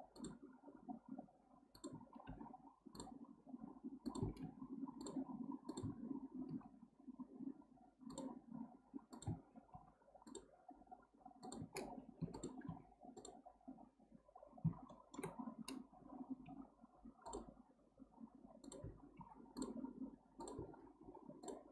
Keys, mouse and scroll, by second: 4.4 k, 12.2 2, 12.3 click, 12.7 x, 14.9-16.4 shift+middle drag, 16.4 k, 19.2 k.